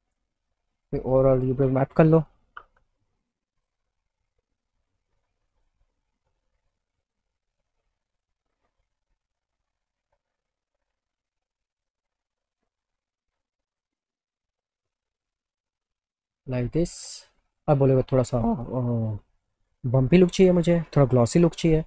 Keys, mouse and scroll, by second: 0.5 click, 3.7 click, 5.6 click, 7.7 click, 8.9-10.2 drag, 11.0-13.0 drag, 13.8 click, 14.1 click, 17.4 click, 18.4 click, 18.6 click, 20.0 click.